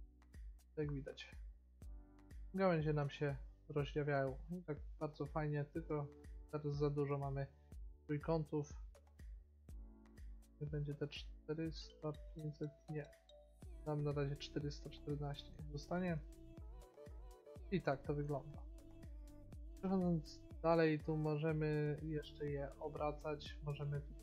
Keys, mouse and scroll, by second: 4.3 middle click, 6.2 middle click, 7.7-9.5 drag, 14.6 middle click, 15.2 middle click, 22.1-24.2 drag.